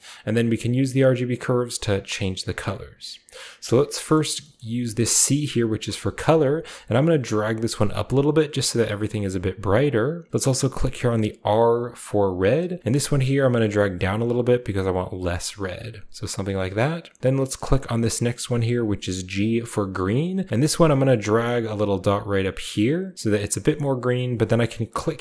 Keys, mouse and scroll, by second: 0.1 click, 1.4 click, 2.1 click, 3.6 click, 4.1 middle click, 4.4-5.9 scroll up 1, 4.4-5.9 middle drag, 5.7 click, 7.4 click, 8.2 click, 8.6 click, 9.0 click, 9.9 click, 11.1 click, 12.4 click, 13.6 click, 14.5 click, 15.0 click, 15.8 click, 18.8 click, 20.6 click, 21.3 click, 21.7 click, 22.3 click, 22.6 click, 23.1 click.